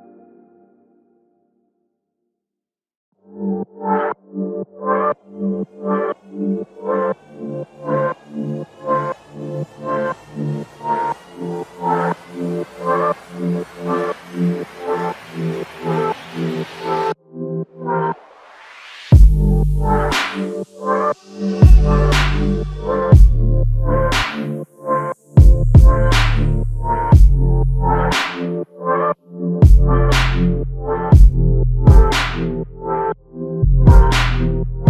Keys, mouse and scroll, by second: 2.6 alt+click, 16.7 ctrl+alt+click, 18.2 alt+shift+click, 22.9 ctrl+right click, 26.1 ctrl+right click, 27.9 ctrl+right click, 29.7 ctrl+right click, 31.9 ctrl+right click.